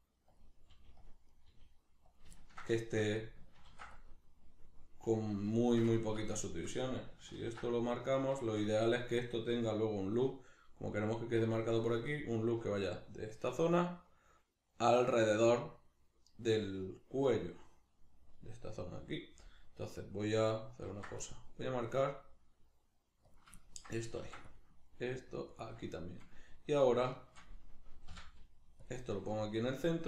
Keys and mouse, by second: 0.4 click, 0.7 g, 1.1 click, 1.3 right click, 1.5 g, 2.2 click, 2.3-5.4 ctrl+middle drag, 3.7 ctrl+r, 5.4 click, 5.6-8.2 shift+middle drag, 7.4 ctrl+r, 8.2 right click, 8.5-17.3 shift+middle drag, 17.3 right click, 20.9 ctrl+r, 23.3 click, 23.6-25.6 ctrl+middle drag, 24.2 ctrl+r, 25.6 click, 26.8 right click, 27.1 shift+right click, 28.1 m.